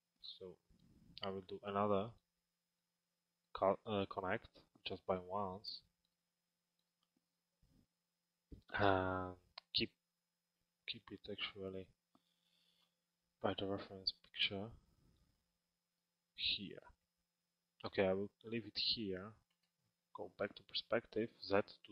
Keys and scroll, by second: 12.5 t, 19.3 p.